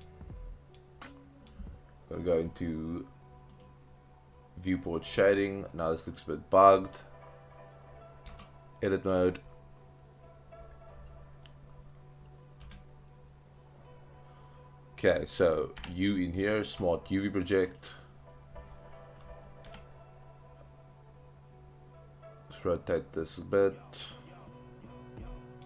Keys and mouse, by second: 4.9 click, 8.4 Tab, 12.6 a, 15.8 u, 19.6 r.